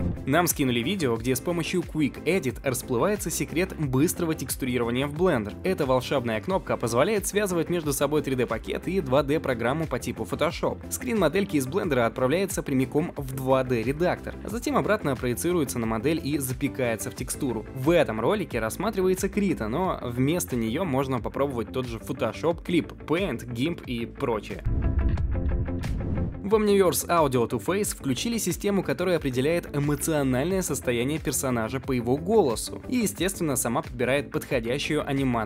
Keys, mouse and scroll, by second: 0.0-2.1 drag.